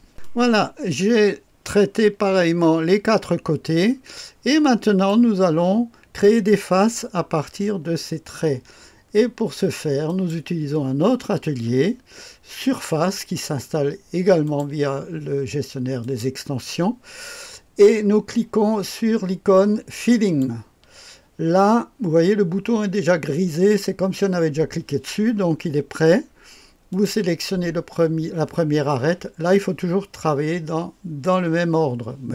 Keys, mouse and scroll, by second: 0.1-5.0 drag, 10.0 click, 12.5 click, 14.4 click, 15.9 click, 20.0 click, 26.8 click.